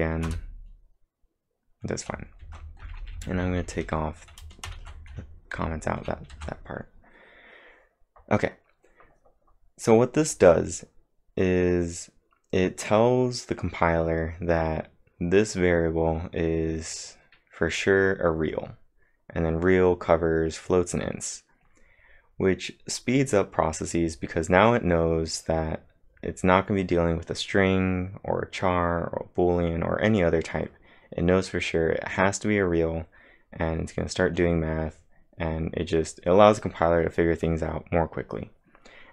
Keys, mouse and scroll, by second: 0.3 Return, 2.4 ctrl+`, 2.8-3.8 typing, 4.7 ctrl+/, 5.5-7.3 typing, 6.3 ctrl+`.